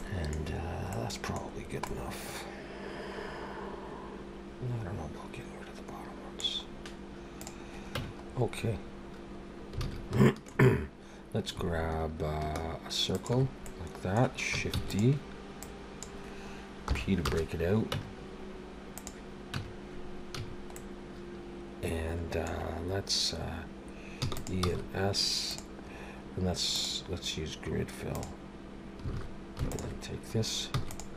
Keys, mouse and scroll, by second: 0.0 middle click, 0.9 middle click, 1.5-1.8 scroll down 3, 1.8 middle click, 6.7-7.3 scroll up 2, 7.4 click, 8.0 Tab, 8.2-9.7 scroll up 4, 9.8 alt+a, 10.2 shift+middle click, 10.6-11.3 scroll up 3, 13.1 alt+shift+click, 13.6 middle click, 14.8 shift+d, 15.6 click, 16.9 p, 17.9 Tab, 18.9 click, 19.5 Tab, 20.3 a, 20.7 middle click, 24.2 e, 24.6 s, 26.7 click, 29.1 alt+a, 29.7 alt+shift+click, 30.7 e.